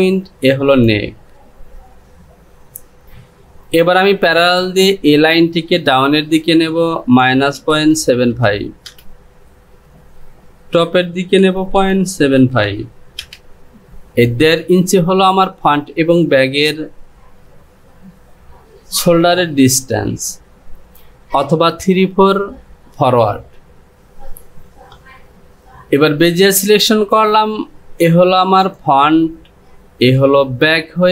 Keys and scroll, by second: 3.0 ctrl+z, 11.6 Down, 12.1 KP_Decimal, 12.4 KP_7.